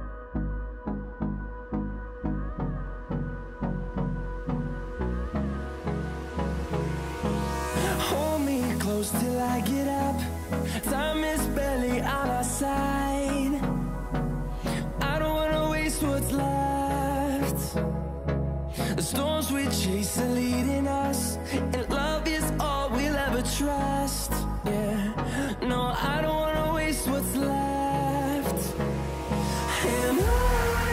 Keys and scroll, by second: 0.0-8.2 typing, 10.5 a, 10.9 c, 13.0 x, 13.7 ctrl+z, 13.9 ctrl+x, 15.3 ctrl+z, 15.7-16.5 typing, 17.9-22.7 typing, 18.5 Tab, 19.4 Tab, 24.9 shift+a, 25.4 s, 27.3-28.6 typing, 30.1 Tab, 30.5-30.9 typing.